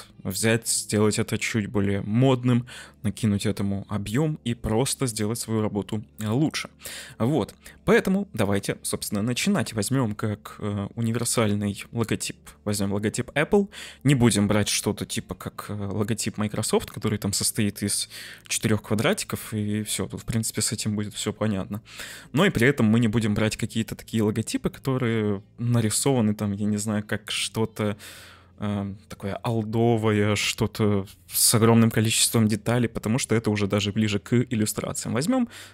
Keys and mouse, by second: 8.3 click, 9.4 Delete, 12.7-13.3 middle drag, 20.2-22.0 middle drag.